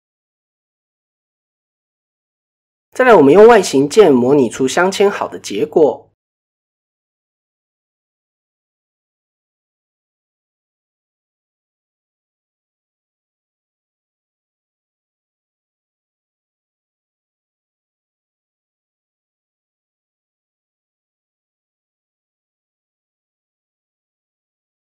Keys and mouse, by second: 2.5 click, 2.8 click, 3.8 Tab, 4.2-4.9 middle drag, 6.4-6.9 middle drag, 7.4 KP_1, 7.8 KP_3, 8.7 shift+middle click, 9.6 click, 10.1 shift+middle click, 11.1 click, 12.6-14.1 drag, 14.9 ctrl+r, 16.4 click, 17.1-18.5 drag, 19.1 KP_7, 19.8 middle drag, 20.6 click, 21.4 click, 21.9 click, 23.2 g.